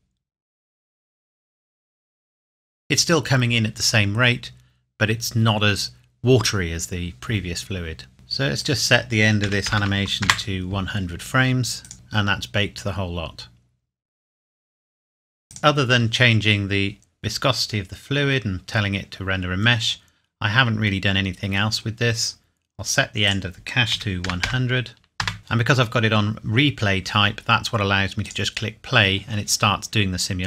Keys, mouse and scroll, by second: 7.8 click, 9.4 KP_1, 9.8 KP_0, 10.2 KP_Enter, 11.8 click, 15.5 click, 15.6-17.3 scroll down 1, 17.7-19.6 scroll down 1, 21.9-23.2 scroll down 1, 23.2 click, 23.9 KP_1, 24.2 KP_0, 25.2 KP_Enter, 25.4-27.0 scroll down 1, 28.2 click.